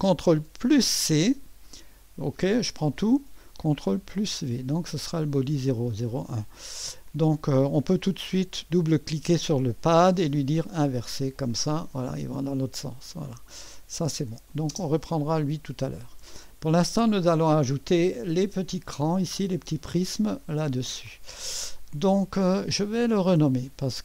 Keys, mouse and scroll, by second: 0.8 ctrl+c, 2.6 click, 4.0 ctrl+v, 6.0-9.2 drag, 10.7 click, 12.9 click, 14.3 click, 14.7 space, 15.0-15.4 drag, 17.0 click, 17.6-18.6 drag, 18.0-18.8 typing, 19.8-20.7 scroll up 1, 20.2-21.8 middle drag.